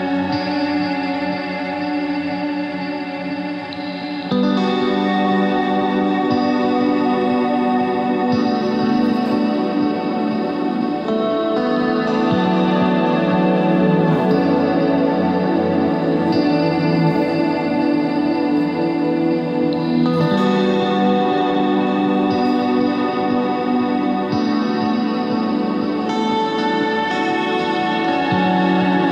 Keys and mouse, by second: 0.0-1.8 drag, 2.0 z, 2.4 s, 4.8 z, 6.4 z, 6.9 s, 11.1 ctrl+Tab, 14.9 ctrl+Tab, 17.3 z, 17.6 z, 18.7 s, 28.2 ctrl+Tab.